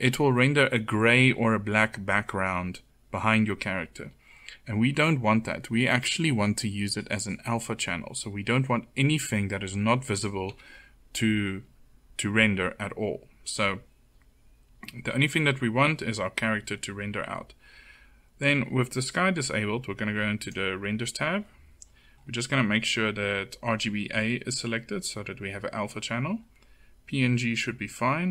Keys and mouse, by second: 3.5 middle click, 5.9 click, 6.2 middle click, 8.9-9.9 middle drag, 9.9 KP_0, 28.2 click.